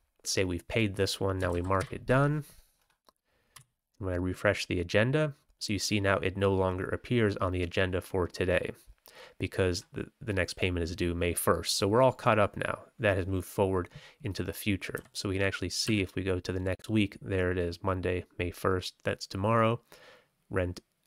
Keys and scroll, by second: 1.5 ctrl+c, 1.7 ctrl+t, 3.5 g, 14.9 f, 15.8 w.